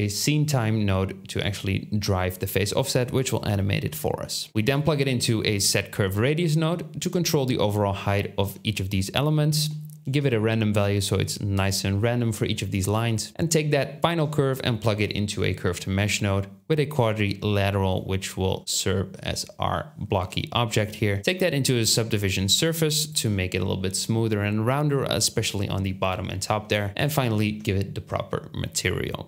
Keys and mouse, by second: 4.3-7.0 shift+middle drag.